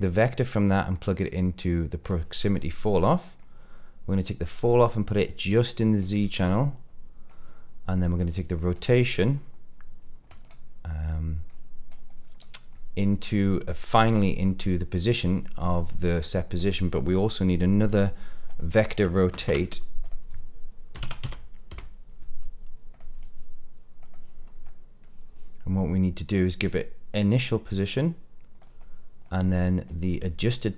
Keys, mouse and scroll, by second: 0.0-2.1 drag, 2.5 middle click, 4.4-6.0 drag, 6.3 middle click, 8.7-10.4 drag, 10.9 middle click, 11.8-12.3 drag, 12.7 middle click, 15.3-16.4 middle drag, 16.5 click, 18.4 click, 19.2 shift+a, 24.6 middle click, 26.2-28.5 drag, 28.7 middle click, 29.8 click, 30.4-30.7 drag.